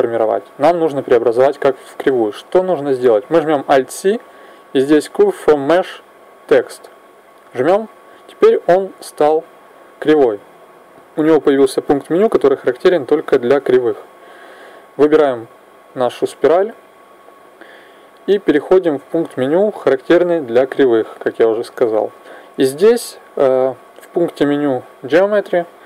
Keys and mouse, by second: 3.5 alt+c, 9.7-11.5 drag, 14.4 right click, 16.4 click, 19.1 click, 21.7-23.5 drag.